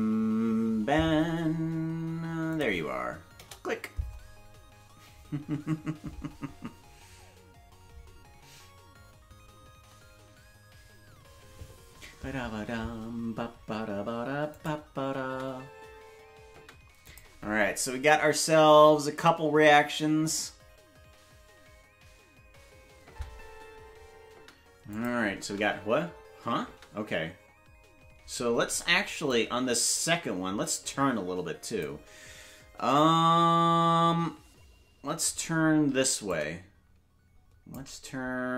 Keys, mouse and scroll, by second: 14.5 click, 15.1 space, 17.1 click, 17.1 space, 23.0 space, 24.9 click, 24.9 space, 25.3 space, 29.3-31.8 drag, 29.3 space, 36.3-37.8 shift+drag.